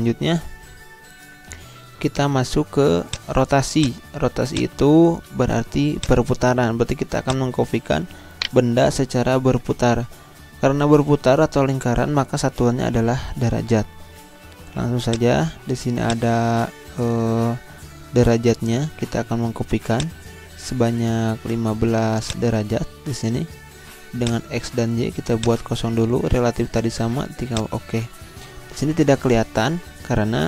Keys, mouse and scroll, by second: 2.0 Delete, 3.0 click, 4.9 Delete, 6.0 click, 8.3 shift+right click, 15.1-19.0 drag, 19.9-27.5 drag.